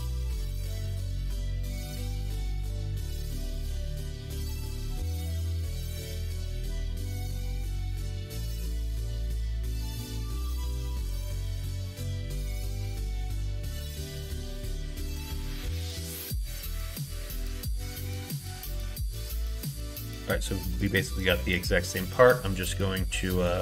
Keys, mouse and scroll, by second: 3.0 e, 8.9 Tab, 10.5 h, 13.5 alt+h, 15.6 alt+z, 16.9 click, 18.0 h, 18.9 click, 19.4 Tab.